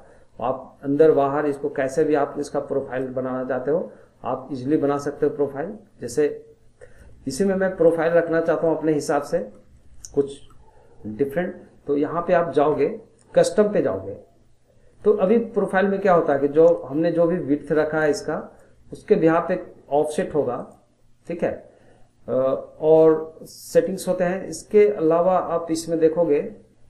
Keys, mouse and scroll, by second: 3.0-6.2 drag, 7.3 middle click, 7.7 scroll down 1, 7.9 middle click, 8.5 scroll down 1, 8.6-13.4 middle drag, 16.3-23.6 drag, 26.8 click.